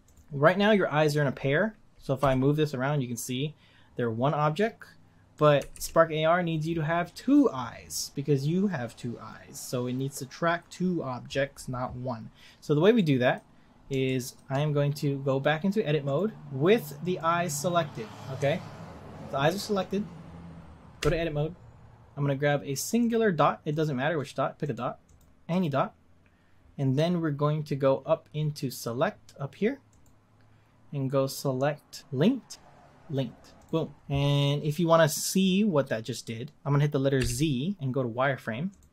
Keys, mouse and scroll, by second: 0.0 click, 2.2 g, 5.7 ctrl+z, 12.5-12.9 scroll up 1, 12.9-16.0 middle drag, 16.0-18.4 drag, 18.4 Tab, 21.8-22.9 scroll up 1, 22.9 click, 23.7 click, 24.1 click, 24.6 click, 25.1 click, 25.5 click, 29.9-32.5 drag, 37.2 z.